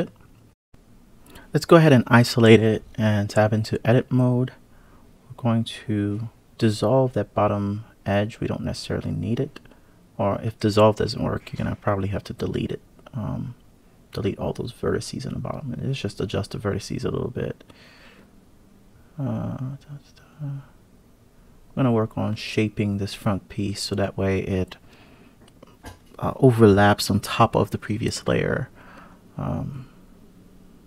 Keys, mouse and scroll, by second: 0.5-1.0 scroll up 1, 1.0 1, 1.3 click, 3.0 alt+click, 4.3 x, 6.5 click, 7.6 click, 8.6 click, 9.1 click, 9.8 click, 11.7 click, 12.7 click, 13.7 click, 15.1 click, 19.3 click, 21.1 click, 26.7 click, 27.9 KP_Divide, 29.0 KP_3, 30.5 click.